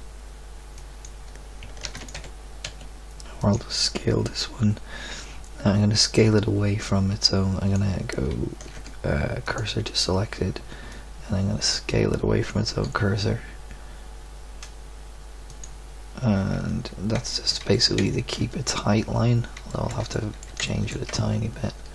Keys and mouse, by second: 1.8 shift+d, 2.1 g, 6.2 click, 8.7 shift+s, 12.7 s, 16.5 Tab, 17.3 click, 21.1 Tab.